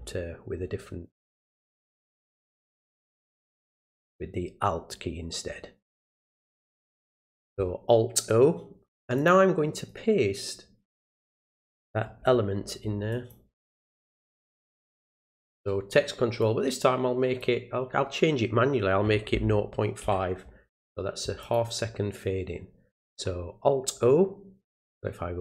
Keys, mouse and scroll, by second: 2.2 click, 4.1 click, 5.9 click, 9.2 click, 9.8 right click, 13.1 click, 16.4-17.4 drag, 21.4 click.